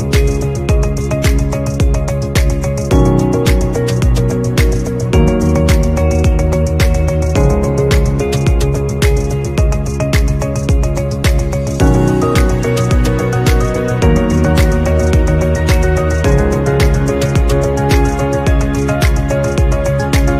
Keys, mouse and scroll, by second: 2.5 shift+scroll down 1, 3.2 scroll down 2, 3.8 scroll up 1, 6.8-7.3 scroll up 2, 11.4 shift+click, 15.1 shift+click.